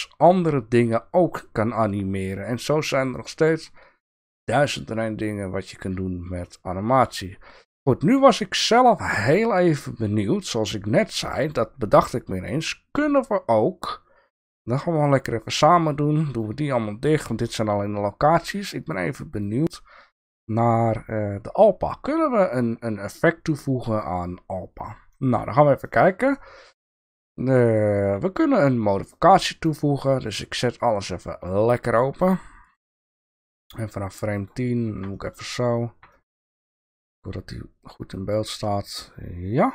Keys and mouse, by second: 8.3-8.7 shift+middle drag, 9.4-11.5 drag, 16.0-16.4 drag, 17.0-17.4 drag, 18.8 click, 19.3 click, 21.9-24.0 drag, 25.3 shift+click, 25.9 shift+click, 29.1 click, 30.6 click, 32.3 shift+click, 33.5-34.5 drag, 35.2 shift+click, 36.2 shift+click, 36.9-39.7 drag.